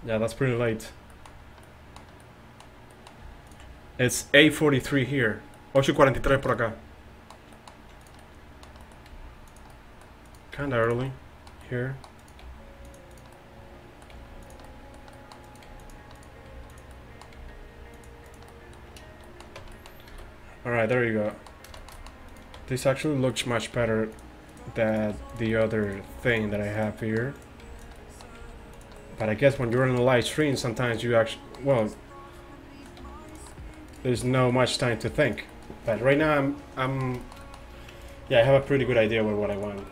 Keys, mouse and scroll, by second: 1.3 middle click, 2.3 middle click, 3.5-6.8 right drag, 8.1-9.9 middle drag, 8.1-9.9 right drag, 9.2 g, 10.3 middle click, 10.3 right click, 10.6 g, 11.1 click, 11.8-14.9 drag, 12.5 g, 14.2 g, 15.7 g, 16.6 g, 17.4 g, 19.6 Tab, 20.1 a, 22.6 Tab, 23.8 g, 25.2 g, 26.2 g, 27.7 g, 28.4 g, 30.0-31.9 middle drag, 31.9-33.8 drag, 33.1 g, 33.9-35.0 drag, 36.5 click, 37.0-38.6 middle drag, 38.6 alt+s.